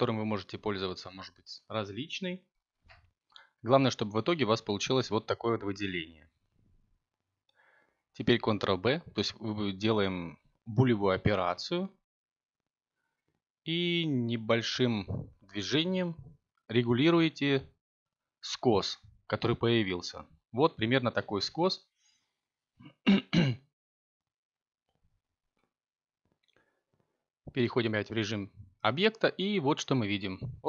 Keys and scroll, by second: 13.8 a, 14.6 Tab, 26.6 7, 29.8 y.